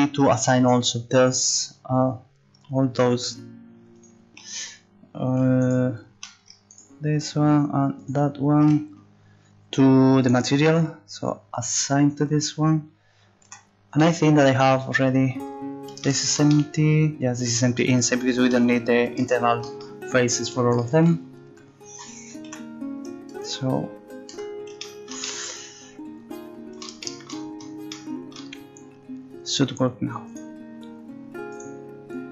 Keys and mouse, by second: 1.2 Tab, 3.9-5.6 drag, 10.2-12.1 drag, 13.4 click, 13.4 z, 21.5 Tab, 22.5 z, 23.4 Tab, 24.3 Tab.